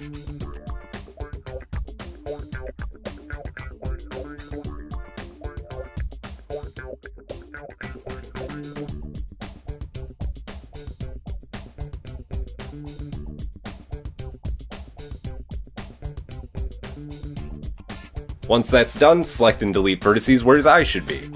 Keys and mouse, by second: 0.2 middle click, 0.3-1.2 shift+drag, 1.2 shift+middle click, 1.4-8.4 drag, 3.1 j, 5.4 KP_1, 7.7 k, 10.9 click, 13.4 g, 15.4-17.3 drag, 17.3-20.3 shift+middle drag, 20.3 click, 20.5-21.3 middle drag.